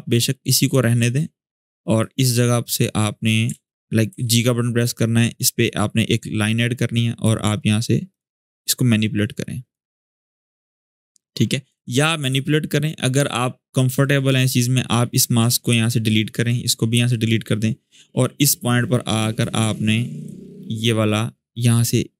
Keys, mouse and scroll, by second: 3.3 ctrl+z, 3.8 g, 4.5-7.2 drag, 11.5 ctrl+z, 12.0 ctrl+z, 14.2 click, 16.4 click, 18.3-19.2 drag.